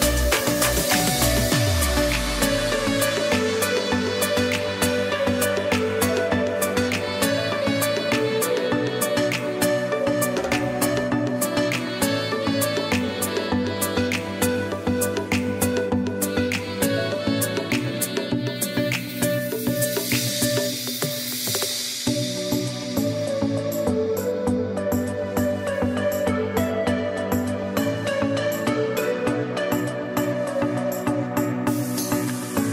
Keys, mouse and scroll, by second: 0.4 click, 1.6 typing, 2.3 click, 4.2 ], 4.6 click, 4.7 ], 7.2 click, 12.9 [, 14.5 click, 15.7 ], 16.8 click, 17.1 ], 18.4 click, 23.8 [, 24.1 click, 25.4 z, 26.0 click, 27.1 space, 27.3 click, 27.8 space, 28.3 click, 29.0 space, 29.2 click, 29.7 space, 29.9 click, 30.1 space, 30.3 click.